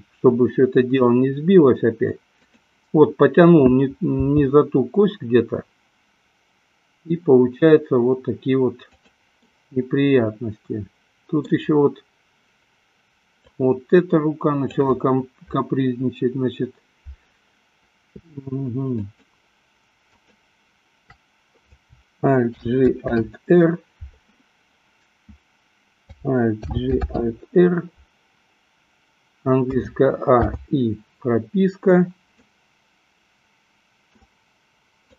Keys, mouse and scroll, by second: 0.0 i, 2.4 click, 4.7 g, 9.7-11.8 middle drag, 13.4-15.0 drag, 19.0 shift+click, 20.3 shift+click, 26.8 alt+g, 27.4 alt+r, 29.9 a, 30.8 i, 32.7-34.4 middle drag.